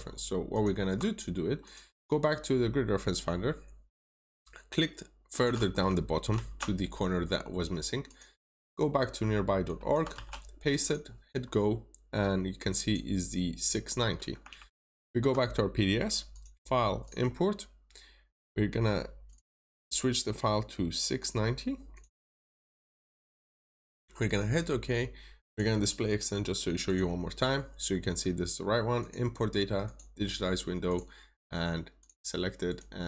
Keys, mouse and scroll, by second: 0.4 alt+click, 1.5 click, 2.2-2.7 scroll down 1, 2.7-3.9 scroll up 1, 3.9 click, 6.2 ctrl+c, 6.3 typing, 8.0 click, 8.4 scroll up 1, 9.5 click, 10.1 typing, 10.7 click, 11.2 scroll down 1, 12.6 click, 14.4 alt+Tab, 16.2 click, 32.6 right click.